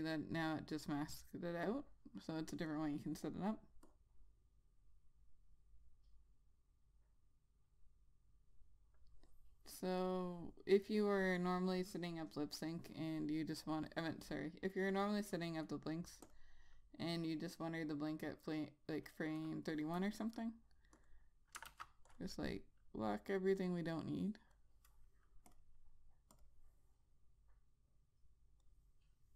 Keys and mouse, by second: 14.2 click, 16.8 click, 21.5 click, 22.1 click, 22.2 ctrl+z, 22.6 click.